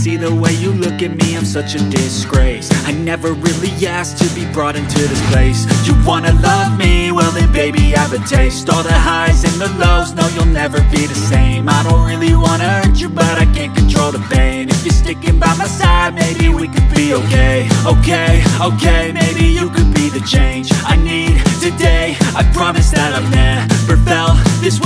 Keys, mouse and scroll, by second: 2.6 double click, 4.7 Delete.